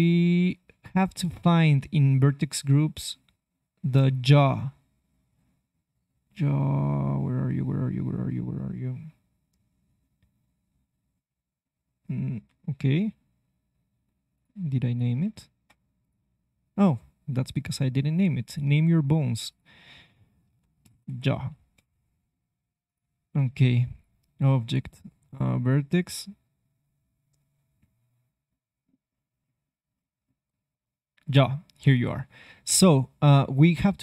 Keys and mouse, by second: 1.6-5.6 drag, 14.3-18.0 drag, 15.1 ctrl+Tab, 22.8 click, 23.3 ctrl+Tab, 26.4-33.7 drag.